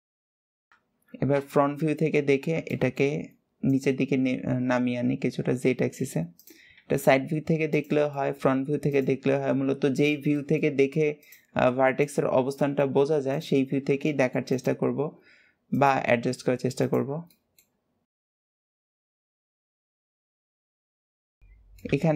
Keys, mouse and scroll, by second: 0.0 shift+click, 0.1 shift+middle click, 0.4 shift+click, 2.1 scroll up 1, 2.5-3.5 shift+middle drag, 3.5 drag, 6.1 click, 8.0-8.7 shift+middle drag, 8.7 click, 10.4-11.0 shift+middle drag, 11.0 click, 12.3 shift+middle click, 13.1 shift+click, 13.8 shift+middle click, 14.3 shift+click, 15.5 shift+click, 16.6 click, 17.1-18.2 shift+middle drag, 18.2 click, 19.1 drag, 19.3 click, 20.0 click, 20.2 shift+click, 20.4 shift+middle click, 20.5 shift+click, 20.8 shift+click, 21.2 scroll down 2, 21.4 middle click.